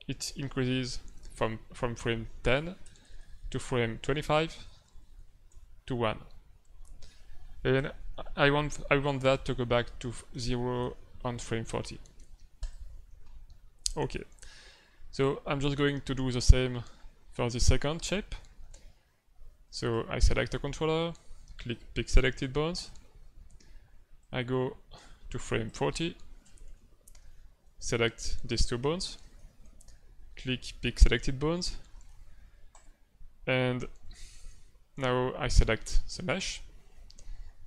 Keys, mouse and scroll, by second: 0.5 Left, 2.8 Right, 3.0-3.7 Right, 3.9 Right, 4.1 Right, 4.3 Right, 4.5-5.0 Right, 5.2 Right, 5.5 Right, 9.2 click, 10.5 Right, 10.8 Right, 12.5 click, 16.2 click, 19.6 right click, 20.3 middle click, 22.7 click, 24.2 click, 26.6 Left, 27.7 right click, 28.9 shift+right click, 29.3 middle click, 32.7 click, 34.3 shift+middle click, 36.1 right click.